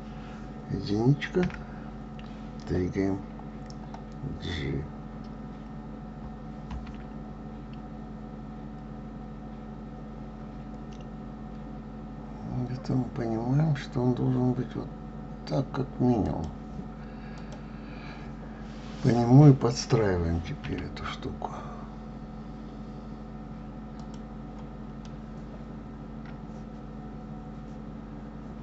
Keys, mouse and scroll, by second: 0.2 KP_2, 17.7 click, 25.4-28.6 middle drag.